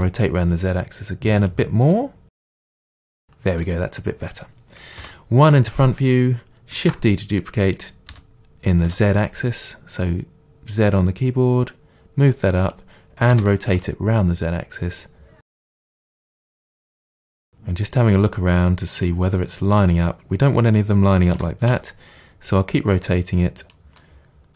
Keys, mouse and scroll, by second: 1.5 click, 1.9-12.7 middle drag, 5.2 KP_1, 6.8 shift+d, 12.7 click, 13.4 r, 16.5 click, 16.7-19.0 middle drag, 17.2 r, 19.0 click, 19.4-23.7 middle drag, 21.4 r, 23.7 click, 24.0-24.5 middle drag.